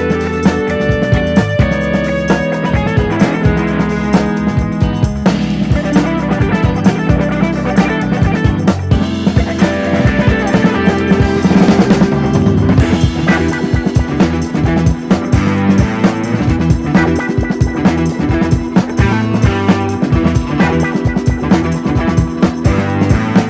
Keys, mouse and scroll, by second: 15.6-16.6 drag, 17.0-17.5 drag, 22.2 click.